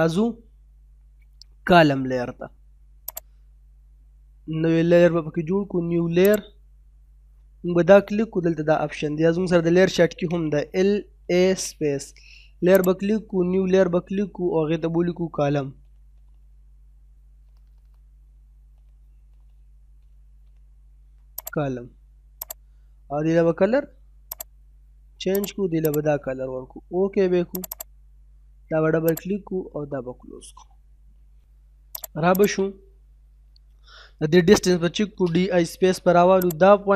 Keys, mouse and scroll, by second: 3.1 click, 6.2 click, 9.6-10.7 typing, 12.7 click, 14.5 typing, 17.1-18.4 typing, 19.4 typing, 21.4 click, 32.3 click, 32.7 middle click, 34.6-35.1 typing, 36.4 click.